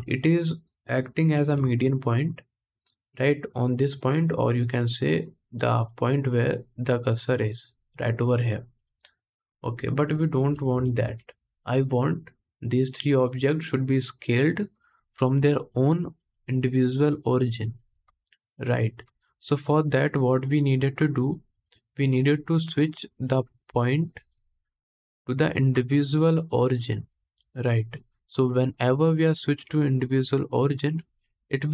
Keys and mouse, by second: 1.0 ctrl+KP_1, 2.0-13.6 drag, 10.5 ctrl+z.